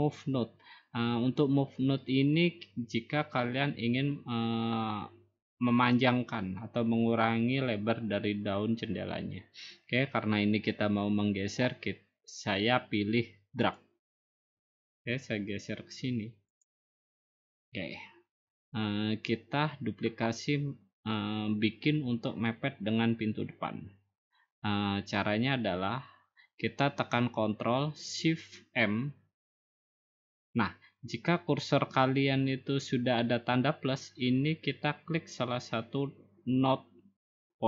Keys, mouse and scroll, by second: 13.7-14.9 drag, 16.6-17.8 drag, 29.8 ctrl+shift+m.